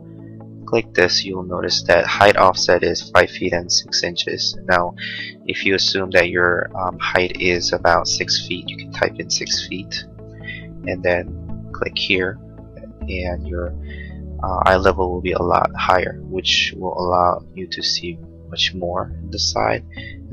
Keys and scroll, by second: 8.6 6, 9.4 ', 10.3 Return.